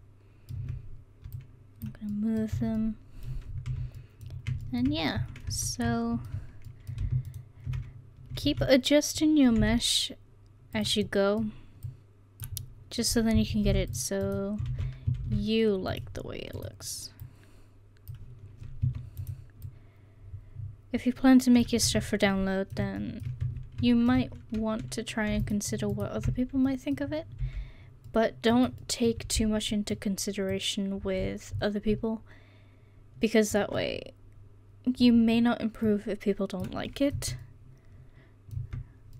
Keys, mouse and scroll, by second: 0.6 Tab, 2.6 Tab, 2.7 click, 3.7 a, 5.5 Tab, 7.4-8.5 right drag, 8.5 s, 9.6-11.1 middle drag, 11.9 click, 12.6 middle click, 13.7 ctrl+r, 14.7 ctrl+z, 15.2 ctrl+r, 17.3 click, 17.3 right click, 19.7 click, 19.7 right click, 21.0 scroll up 1, 21.3 click, 21.6-23.4 middle drag, 21.9 Tab, 23.4 Tab, 24.1 middle click, 25.4-26.6 right drag, 26.8 middle click, 27.4 c, 29.1 middle click, 30.5-32.5 drag, 32.5 middle click, 35.9-36.9 drag, 37.2 Tab, 38.6 Tab.